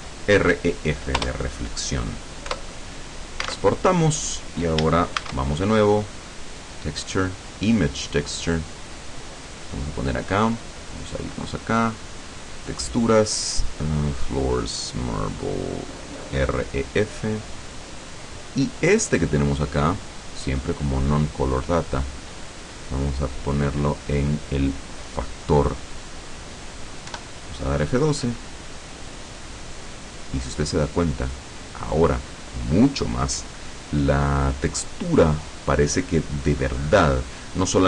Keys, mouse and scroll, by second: 1.3 Return, 2.6 Return, 3.6 alt+Tab, 5.3 shift+a, 7.5 click, 10.1 click, 11.0 click, 12.7 click, 16.2 click, 17.8 click, 19.4-20.2 drag, 20.9 click, 21.7 click, 22.7-25.5 drag, 27.2 F12.